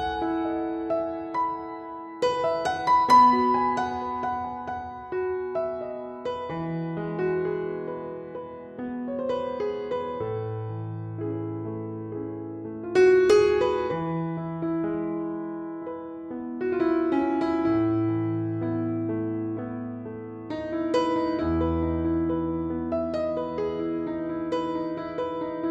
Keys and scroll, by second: 1.2 super+j, 6.5 super+s, 10.9 super+s, 12.0 Left, 12.1 Right, 13.1 f, 22.5 super+z.